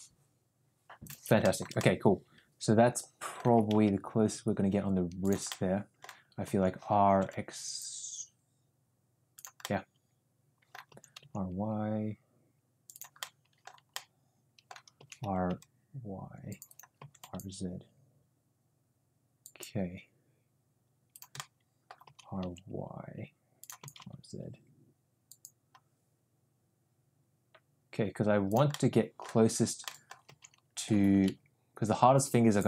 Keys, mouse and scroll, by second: 1.3 shift+middle click, 1.7-3.4 middle drag, 3.5 r, 5.4-5.9 middle drag, 6.4 r, 9.5-10.7 middle drag, 10.8 r, 13.1 middle click, 13.9 middle click, 14.9 r, 16.9 r, 21.4 middle click, 22.0 r, 23.7 r, 28.6-29.2 middle drag, 29.8 middle click, 30.2 r.